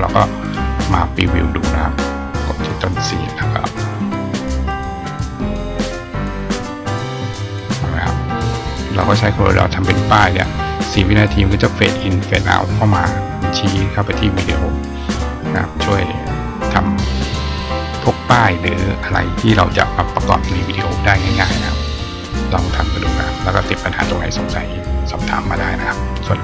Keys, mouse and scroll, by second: 1.7 click, 3.4 click, 5.1 click, 6.2 click, 6.4 click.